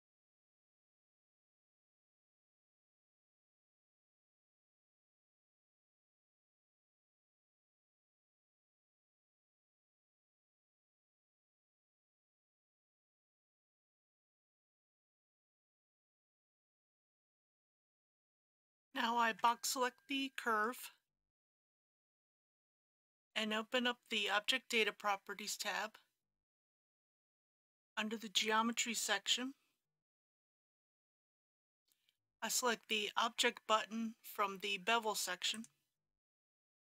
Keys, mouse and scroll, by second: 0.6 e, 1.1 x, 2.6 KP_2, 3.8 ctrl+z, 4.7 e, 4.9 ctrl+x, 5.9 KP_2, 7.2-15.2 typing, 8.2 ctrl+z, 12.7 ctrl+z, 16.1 middle click, 19.4 b, 21.2-22.4 drag, 27.2-28.3 scroll down 1, 28.3 click, 29.0-29.7 scroll down 2, 35.5 click.